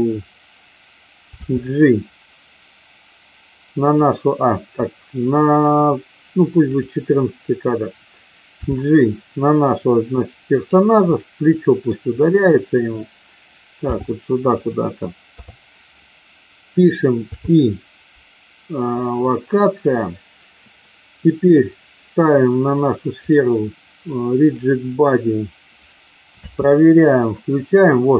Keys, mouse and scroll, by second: 1.4 g, 3.7 click, 6.6 click, 8.6 g, 10.6 click, 11.1 middle click, 13.7 g, 14.5 click, 15.4 KP_3, 17.3 i, 23.2 click, 26.4 space.